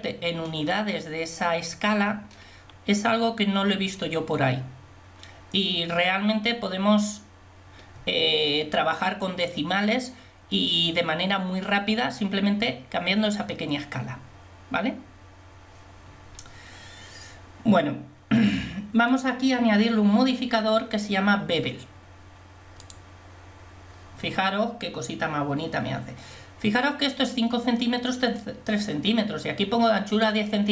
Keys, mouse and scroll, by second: 19.1-23.0 drag, 30.1-30.7 drag.